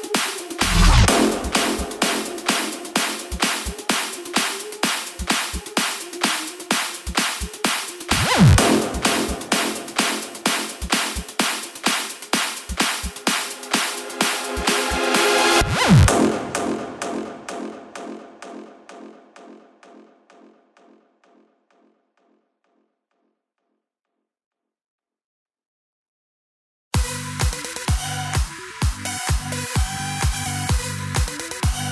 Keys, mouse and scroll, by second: 3.1 space, 5.8-23.6 drag, 23.7-28.4 drag, 28.4 KP_0.